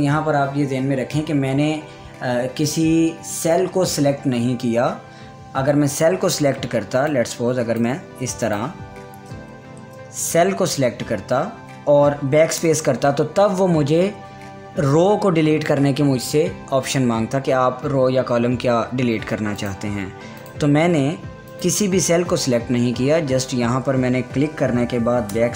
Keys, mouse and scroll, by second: 7.6-9.0 drag, 9.7 ctrl+z, 10.3 ctrl+z, 11.3-20.1 drag.